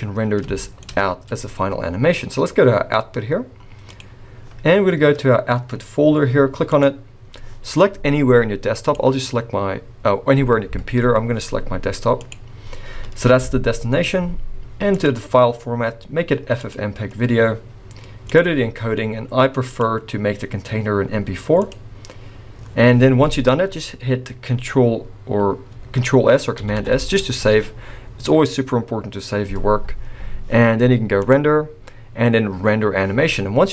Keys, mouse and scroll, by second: 0.2 scroll down 2, 0.5 shift+middle click, 0.8-1.5 scroll up 1, 3.9 click, 6.7 click, 14.9 click, 18.2 click, 18.5-19.6 scroll down 2, 19.6 click, 19.6-21.3 scroll down 2, 26.6-26.9 ctrl+s, 31.2 click.